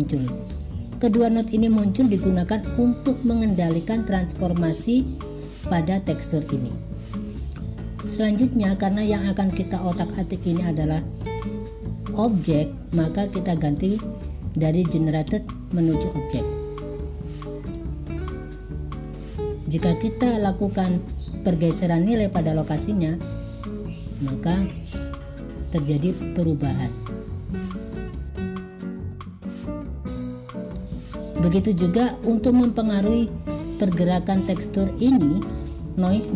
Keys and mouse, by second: 1.7 click, 16.2-17.9 drag, 22.7-29.5 drag.